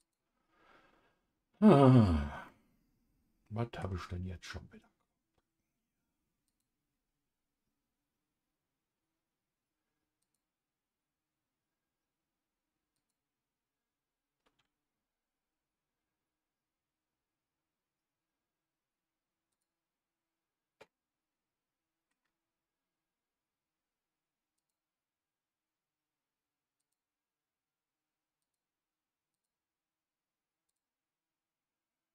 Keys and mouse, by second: 0.0-1.1 drag, 2.4-3.8 middle drag, 6.4 click, 10.2 click, 12.9 click, 19.5 click, 20.8-22.1 middle drag, 24.5 click, 26.7 click, 28.4-29.4 drag, 30.6 click.